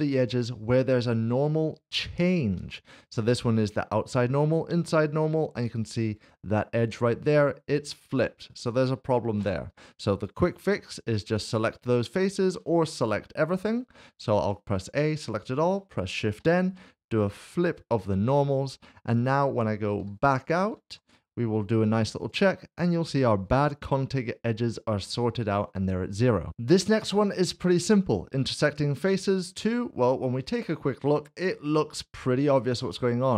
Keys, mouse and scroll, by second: 2.9 shift+middle click, 9.7 3, 10.1 click, 10.7 shift+click, 13.4-14.4 typing, 16.4 typing, 20.0 typing, 20.9 Tab, 22.2 click, 27.1 click, 29.6 click, 29.8 middle click, 30.5 shift+middle click, 31.5 middle click.